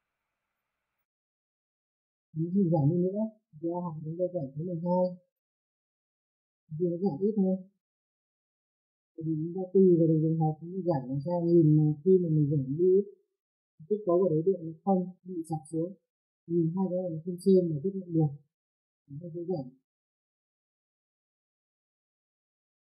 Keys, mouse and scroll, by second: 1.7 click, 4.6 click, 5.8 KP_2, 6.6 click, 8.9 click, 11.0 middle click, 11.9 click, 14.1 F3, 15.3 F4, 15.5 click, 18.5 middle click, 19.4 middle click, 21.1 middle click, 21.7 alt+middle click.